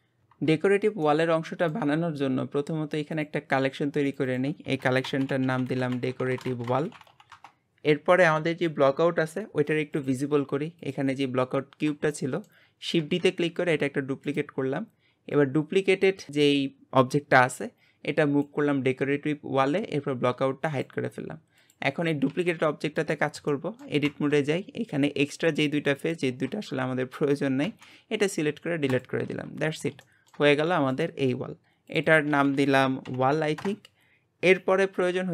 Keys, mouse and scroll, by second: 1.0-3.1 shift+middle drag, 3.1-4.1 drag, 4.3-7.1 drag, 9.9 click, 10.8 click, 12.1-13.0 shift+middle drag, 13.0 shift+d, 15.3 click, 20.6 click, 21.6 click, 22.3 g, 23.5 shift+middle click, 24.1 Tab, 25.4 click, 26.0 shift+click, 27.6 x, 29.3 Tab, 29.7 click, 30.0 shift+middle click, 30.5 g, 31.9 click, 32.1-33.2 drag, 33.2 l.